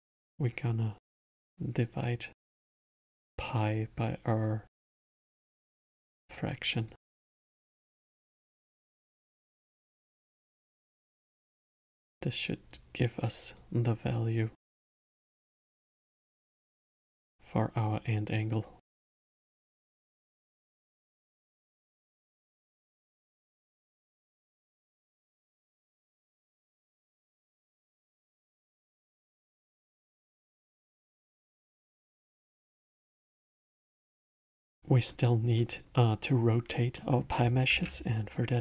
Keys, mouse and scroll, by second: 0.0-1.0 middle drag, 1.0 drag, 2.7-3.9 drag, 6.0-6.8 middle drag, 6.8 click, 7.3-9.2 drag, 9.6-11.7 drag, 11.7-12.7 middle drag, 12.7-14.6 drag, 14.6-16.2 middle drag, 16.2 click, 19.3 click, 20.0-23.0 middle drag, 24.0-25.1 middle drag, 25.1 click, 26.6 middle click, 27.2 click, 28.0-29.1 middle drag, 29.1 click, 30.0-31.2 drag, 32.6-36.4 middle drag, 36.9-37.7 middle drag, 37.7 shift+a.